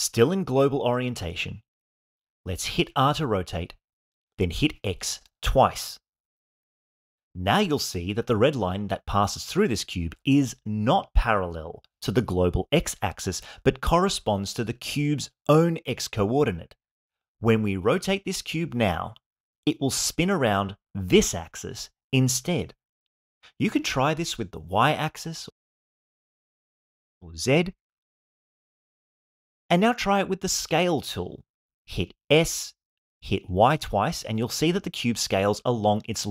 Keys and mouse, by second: 0.5-2.2 drag, 4.0 r, 5.2 x, 5.7 x, 23.4 r, 24.0 y, 24.3 y, 27.2 r, 27.5 z, 27.8 z, 30.1 s, 30.9 y, 31.4 y.